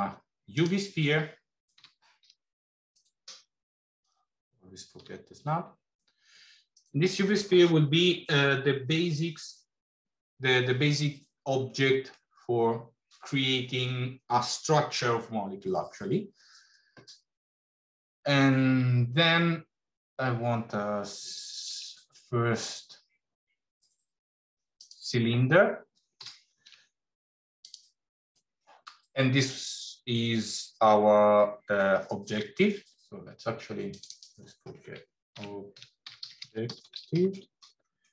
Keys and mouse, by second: 1.8 g, 4.9 g, 21.5 shift+a, 26.1 g, 33.8 click, 34.1-38.1 drag.